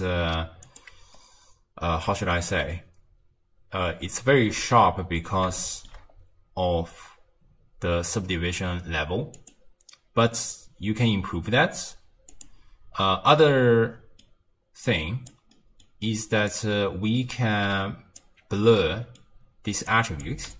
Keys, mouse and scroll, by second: 1.2-4.6 middle drag, 4.6 z, 5.6-6.0 shift+middle drag, 6.0-8.2 scroll up 3, 8.2-9.4 scroll up 1, 9.4-13.0 drag, 13.0-14.9 middle drag, 14.9 click, 15.5-16.5 middle drag, 16.5 click, 18.5 scroll down 1, 18.8-19.9 middle drag, 19.9 click, 20.5 click.